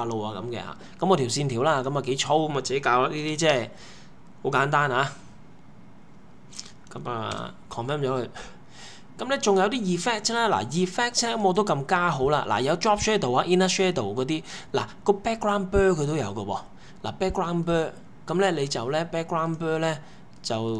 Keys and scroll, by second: 2.9-3.9 typing, 7.3 Return.